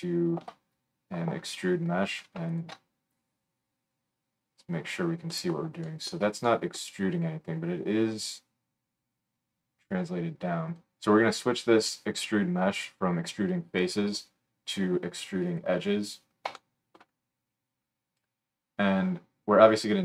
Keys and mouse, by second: 2.5 alt+shift+middle click, 5.7-10.7 shift+right drag, 10.7-20.0 middle drag.